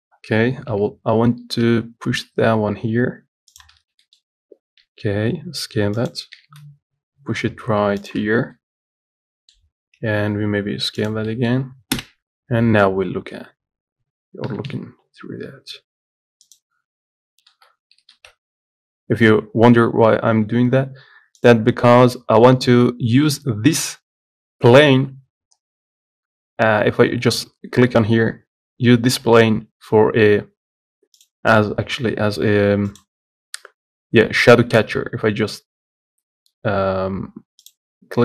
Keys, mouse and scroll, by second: 1.0 g, 4.1 scroll up 4, 4.3 shift+middle click, 4.6-5.1 scroll up 1, 5.1 s, 8.6 scroll down 3, 8.8-9.9 middle drag, 9.9-10.3 scroll down 1, 10.3 s, 11.6 middle click, 12.2 KP_0, 14.7 g, 18.0 z, 18.4 ctrl+s, 22.1 click, 25.9-27.0 scroll down 4, 32.4-33.3 scroll down 7, 33.8-35.7 scroll down 1, 37.9 click.